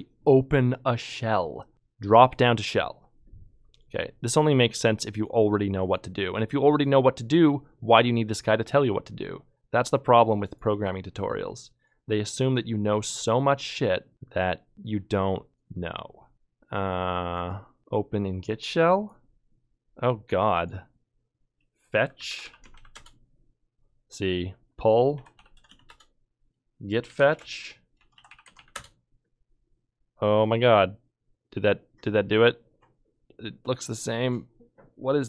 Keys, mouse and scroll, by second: 1.7 ctrl+Tab, 21.3 ctrl+Tab, 21.9-23.3 typing, 24.9-29.1 typing.